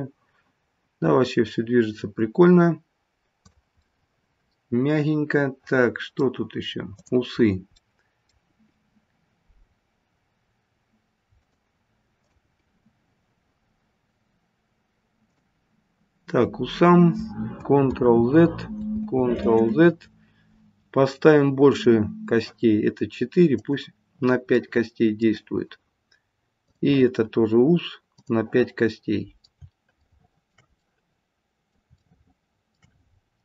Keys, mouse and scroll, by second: 3.7 middle click, 7.0 click, 7.4-7.8 scroll down 1, 7.8 middle click, 8.4 g, 12.2 click, 12.6 g, 17.8 ctrl+z, 18.9 ctrl+z, 21.6 ctrl+z, 21.6 click, 23.6 click, 24.5 middle click, 26.6 click, 28.1 click, 28.9 middle click, 30.0 shift+middle click, 30.8 middle click, 32.0 shift+middle click, 33.0-33.4 scroll up 1.